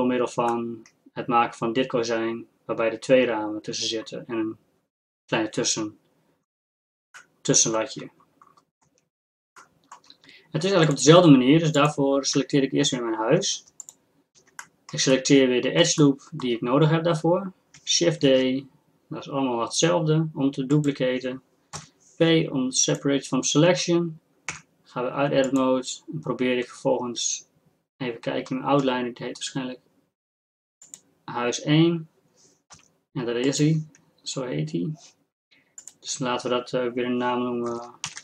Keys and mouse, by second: 6.5-8.6 drag, 8.8 Tab, 11.0-13.7 drag, 12.4 Tab, 13.8-16.4 drag, 18.2 shift+d, 21.8 p, 24.5 Tab, 25.5-27.8 drag, 30.9-32.9 drag, 32.9 g, 35.8-37.7 drag.